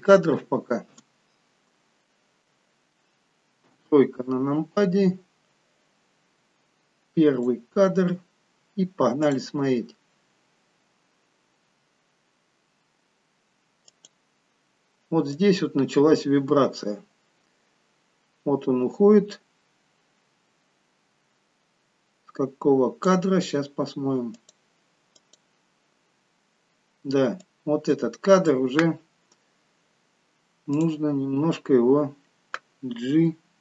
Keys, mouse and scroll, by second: 3.6 KP_3, 4.8-5.5 scroll up 1, 7.3 click, 9.3 click, 13.9 click, 15.4 click, 24.3 click, 25.2 click, 29.4-30.5 scroll up 1, 30.5 scroll up 2, 30.8 click, 31.6-32.6 scroll down 1, 32.6-33.2 scroll down 1, 33.2 g.